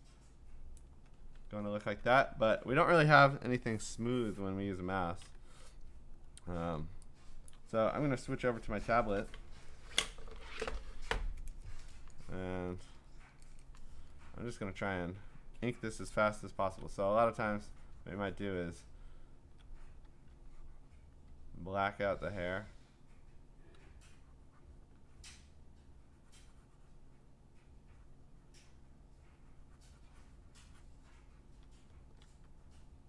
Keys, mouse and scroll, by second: 0.8 click, 1.3 ctrl+z, 5.8-6.4 scroll, 7.5 click, 16.1-16.8 ], 18.7 click, 18.8 ], 19.3-19.6 ], 19.9 click, 20.0 [, 20.9 click, 21.3 [, 21.8 [, 22.4 click, 22.4 [, 22.9 click, 23.6 click, 24.8 click, 25.0 click, 25.8 click, 26.0 click, 27.6 click, 31.4 click, 31.6 [, 32.1 [, 32.2 [, 32.9 click.